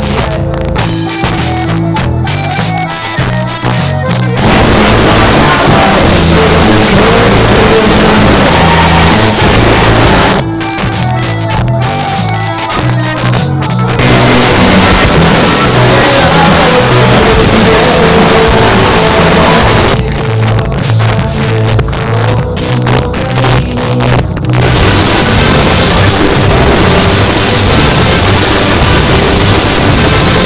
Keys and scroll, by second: 10.3 Page_Down, 19.8 Page_Down.